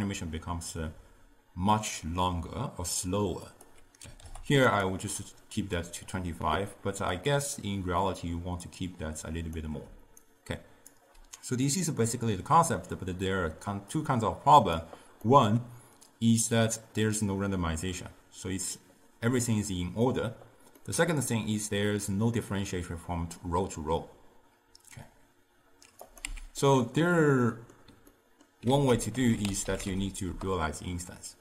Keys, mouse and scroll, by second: 3.5-4.9 drag, 7.2-10.0 drag, 10.0 d, 10.3 right click, 11.0 d, 11.7-14.8 drag, 15.3-18.3 middle drag, 20.8-23.9 middle drag, 26.1 click, 26.3 x, 26.7-28.7 middle drag, 28.7 ctrl+a.